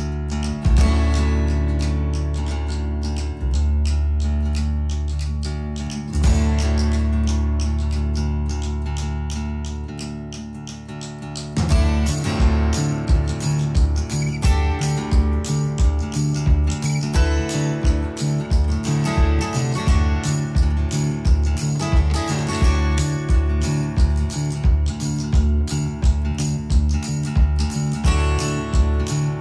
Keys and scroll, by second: 17.9 Escape.